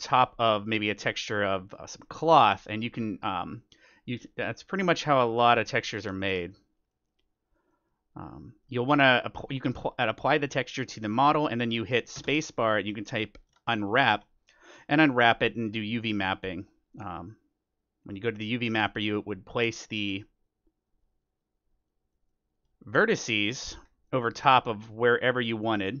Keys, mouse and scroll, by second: 1.0-12.4 drag, 3.0-4.8 middle drag, 4.9-11.8 middle drag, 12.1 space, 16.1-18.6 drag, 18.7-24.1 drag, 19.1-20.8 middle drag, 22.1-23.8 middle drag, 22.8 Tab, 23.2 a, 24.0-25.7 middle drag, 25.1 click.